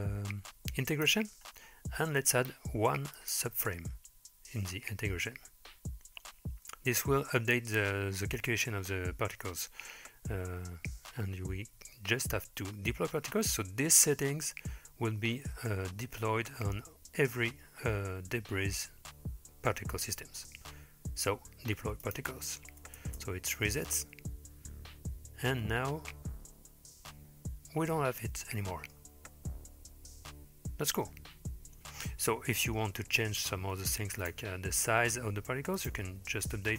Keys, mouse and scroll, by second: 0.9 click, 1.4-2.0 scroll down 2, 3.2 click, 22.0 click, 23.0 space, 23.9 click, 28.5-29.0 middle drag, 32.7-34.2 scroll down 4, 34.2 click, 34.6-35.8 scroll down 2, 35.8-36.7 drag.